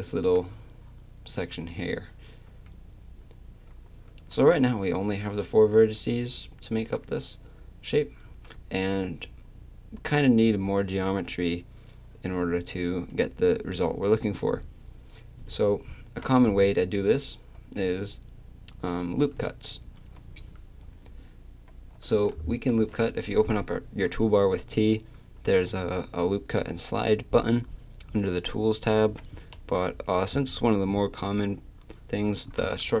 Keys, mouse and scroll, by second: 2.5 a, 4.8 click, 8.3 a, 22.7 t, 29.8 t.